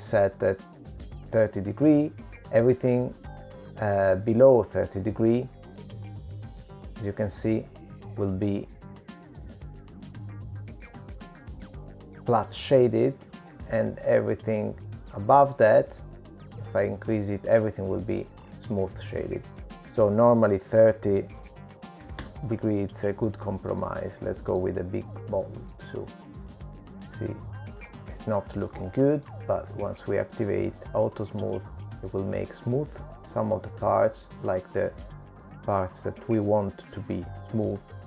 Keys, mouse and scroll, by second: 0.2-1.2 scroll up 5, 1.2-2.1 scroll down 1, 2.1-2.5 scroll down 2, 7.2 click, 16.2 click, 22.2 click, 26.6 click, 27.3 right click, 30.0 shift+middle click, 31.6 middle click, 33.4 click, 34.3 click, 34.9 middle click, 36.7 middle click.